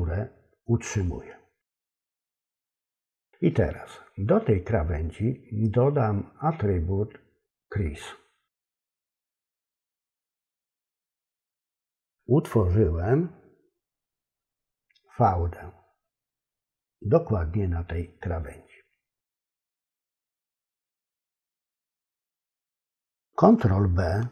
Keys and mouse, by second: 8.9-11.1 drag.